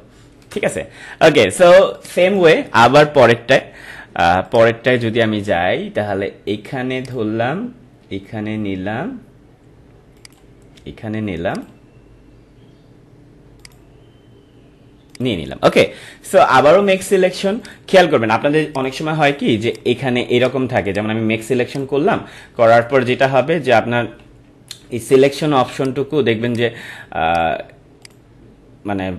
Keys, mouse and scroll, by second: 1.4 space, 1.9 click, 2.1 space, 4.4 click, 7.0 click, 10.2 click, 16.5 right click, 17.6 click, 20.8 right click, 21.7 click, 23.4 ctrl+-, 25.8 right click, 26.4 click.